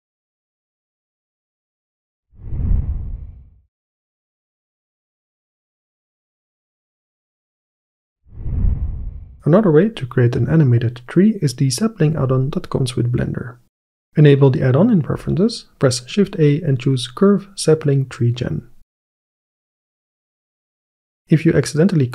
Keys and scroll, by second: 16.2 shift+a.